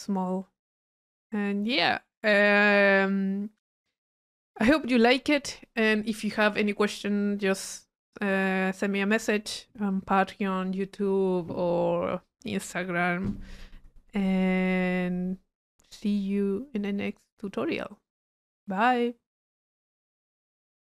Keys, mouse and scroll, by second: 0.7 middle click, 1.5 drag, 3.0-5.4 middle drag.